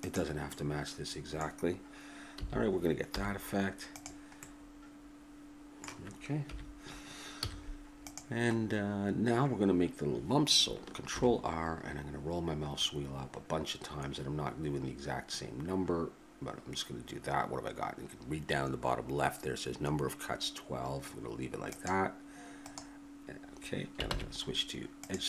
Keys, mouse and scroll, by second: 0.6-2.3 middle drag, 2.3 a, 3.1 z, 4.4-6.2 middle drag, 6.4 KP_1, 7.4 z, 8.6 middle click, 9.2 click, 11.1 ctrl+r, 24.1 ctrl+Tab.